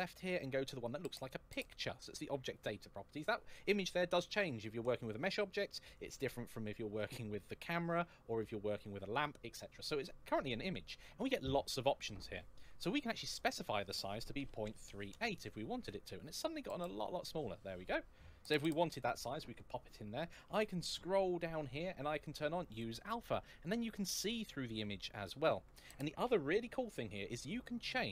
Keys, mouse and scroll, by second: 3.0 click, 13.2 click, 14.5 KP_3, 14.7 KP_8, 15.0 Return, 16.2-16.9 scroll up 1, 20.6 scroll down 1, 22.5 click, 23.7 middle click.